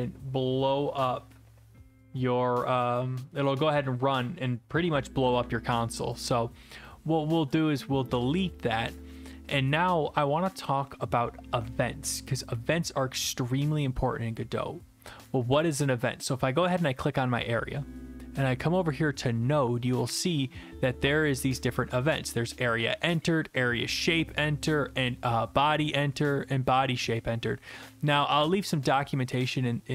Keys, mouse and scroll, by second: 7.5 click, 8.1 BackSpace, 16.6 click.